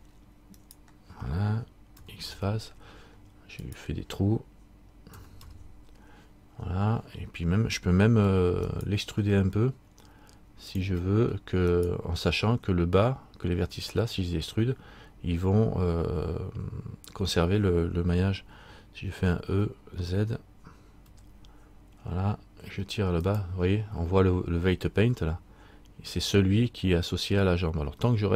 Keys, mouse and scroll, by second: 0.8 right click, 2.2 x, 3.8 right click, 5.3 x, 8.8 alt+right click, 10.9 click, 11.9 alt+right click, 19.7 e, 28.0-28.3 scroll down 1.